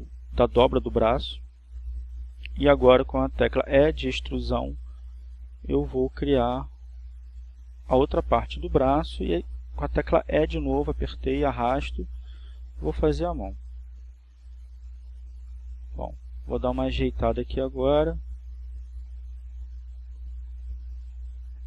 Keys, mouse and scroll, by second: 5.5 click, 8.3 e, 12.8 click, 14.5 e, 19.9 click, 20.8 right click.